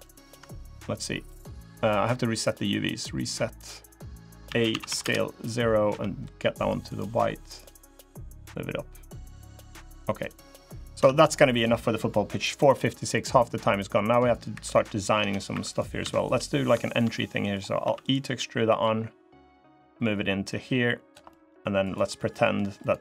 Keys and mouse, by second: 2.3 click, 4.2 a, 4.5 s, 5.6 g, 7.9-10.0 drag, 10.7 Tab, 12.9 click, 13.7 click, 14.3 3, 14.5 click, 14.9 Tab, 15.3 3, 15.5 click, 16.0 shift+click, 16.2 click, 16.9 click, 17.6 e, 18.6-20.9 drag, 21.1 click, 22.1 click.